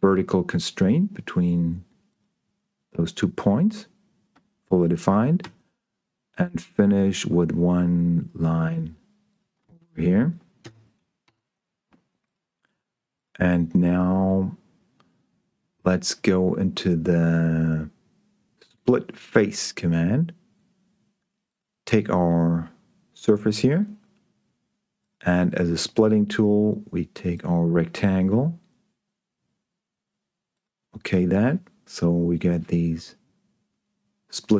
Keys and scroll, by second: 5.7 l, 10.9 Escape.